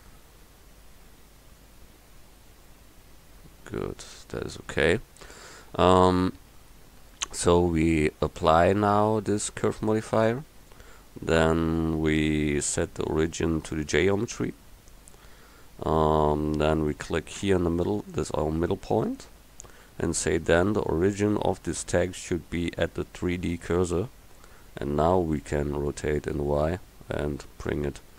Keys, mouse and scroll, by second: 0.1 g, 9.8-12.4 drag, 12.8 click, 25.9 r.